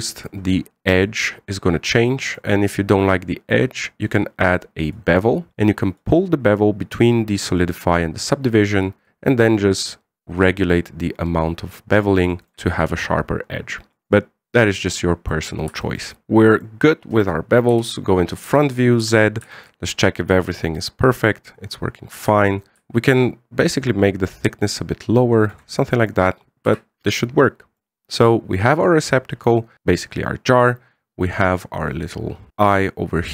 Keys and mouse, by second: 0.6-1.0 middle drag, 1.8-3.1 middle drag, 4.4 click, 6.8-8.3 drag, 9.7-13.2 shift+drag, 14.8 click, 15.6-16.1 middle drag, 16.2 middle click, 16.6-17.4 middle drag, 18.5 KP_1, 19.2 z, 20.3 shift+middle click, 22.7 shift+click, 23.1 shift+middle click, 23.7-26.3 shift+drag, 26.5-26.8 middle drag, 27.4 z, 27.8-28.5 middle drag, 32.5 right click.